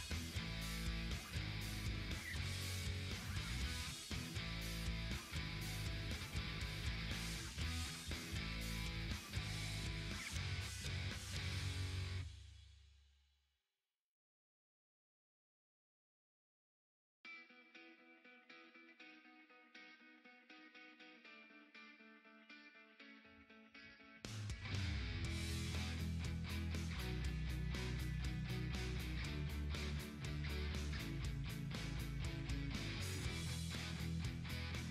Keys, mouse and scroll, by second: 8.9 click, 10.5 click, 12.1 click, 15.1 click, 15.4 right click, 16.8 click, 19.8-25.8 drag, 27.9-34.9 drag.